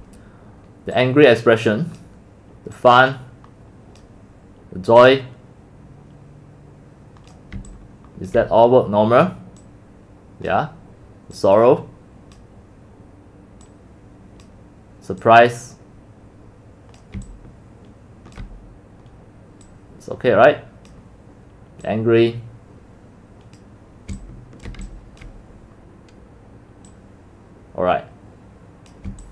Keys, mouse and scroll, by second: 0.0-0.2 typing, 7.6 c, 8.2-8.5 c, 8.8 c, 10.5-17.1 drag, 17.2-18.6 c, 20.9-24.2 drag, 24.2 c, 24.7 c, 24.8 click, 25.0 x, 25.3-25.8 drag, 28.9 click.